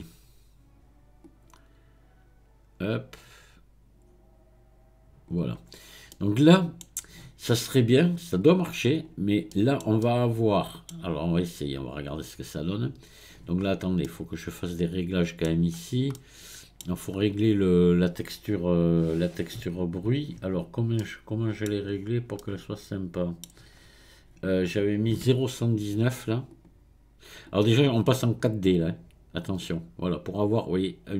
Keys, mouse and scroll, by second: 1.3 click, 5.7-6.1 scroll down 1, 6.1-7.5 middle drag, 7.5-8.4 scroll up 1, 8.4-9.5 drag, 9.5-12.1 middle drag, 12.1-13.6 drag, 13.6-14.0 scroll up 1, 14.0-15.7 middle drag, 15.7-16.1 scroll up 1, 16.1 middle click, 17.0-20.2 scroll up 1, 26.5-27.6 drag, 28.2-31.1 drag.